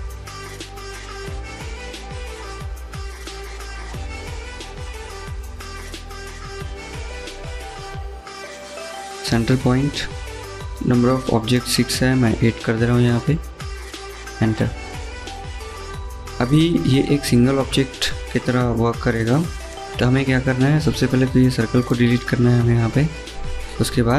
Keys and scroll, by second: 11.9 8, 12.3 Return, 22.1 Delete.